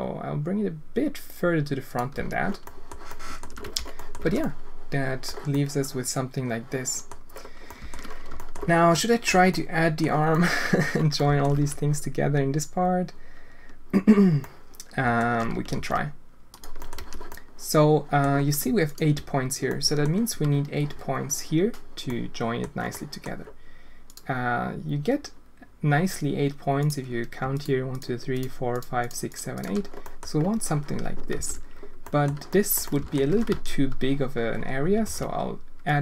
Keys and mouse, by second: 2.1 z, 2.6 click, 3.0 alt+shift+click, 3.6 Tab, 3.9 drag, 4.2 alt+a, 4.4-5.2 drag, 5.5-7.0 drag, 7.6 alt+shift+click, 8.3 shift+click, 8.9 click, 9.3 Tab, 9.5-10.0 drag, 10.3-10.8 drag, 11.2 alt+shift+click, 11.5 z, 14.4 click, 15.7 ctrl+r, 16.8 click, 16.9 z, 17.3 click, 17.8 click, 18.9 alt+click, 19.7 click, 22.0 middle click, 22.9 middle click, 27.5 shift+click, 27.9 shift+click, 28.3 shift+click, 28.7 shift+click, 29.0 shift+click, 29.5 shift+click, 30.0 click, 31.3 alt+a, 32.0 click, 32.5 click, 32.8 alt+shift+click, 33.4 z, 35.0 ctrl+r.